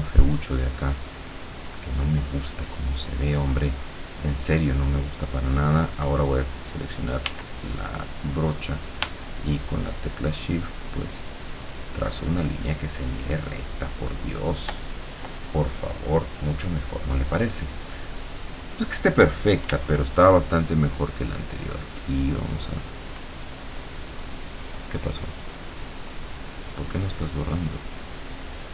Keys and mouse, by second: 7.3 w, 10.1-14.7 shift+drag, 19.7 e, 20.9 click, 25.7-28.7 drag.